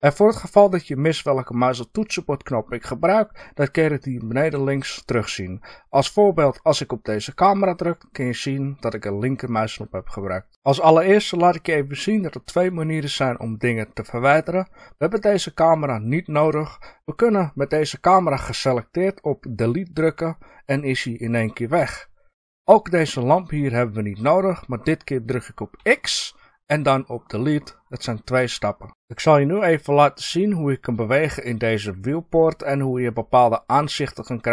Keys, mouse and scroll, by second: 7.3 click, 20.0 Delete, 23.7 click, 25.8 x.